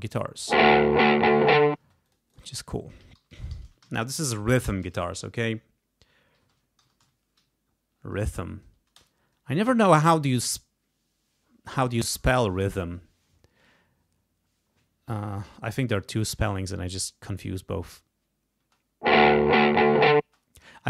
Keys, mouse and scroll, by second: 0.0 space, 1.7 space, 2.0 click, 2.9-4.9 typing, 4.6 Home, 6.0-7.9 typing, 8.4 End, 8.9 Return, 18.5 space, 20.2 space, 20.6 right click.